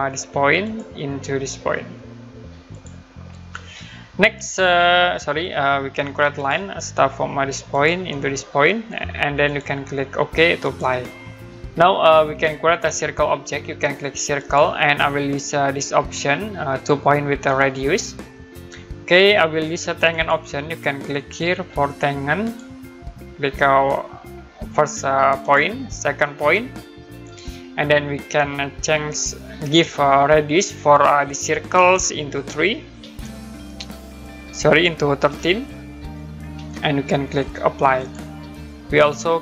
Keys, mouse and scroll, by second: 0.6 click, 2.7 click, 3.5 Escape, 6.3 click, 9.4 click, 11.4 scroll up 1, 12.1 scroll down 1, 12.4 middle click, 14.3 click, 17.6 click, 20.1 click, 22.4 click, 25.4 click, 27.2 click, 33.0 3, 35.2-36.4 typing, 38.0 click.